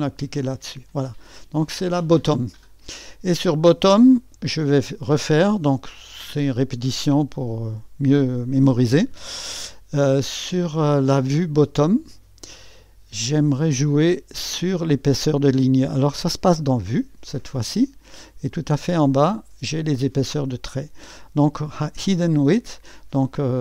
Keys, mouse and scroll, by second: 1.8 click, 5.2-8.3 drag, 12.0 click, 12.6-15.7 drag, 16.6 click, 18.5-19.5 drag, 19.7-23.6 drag.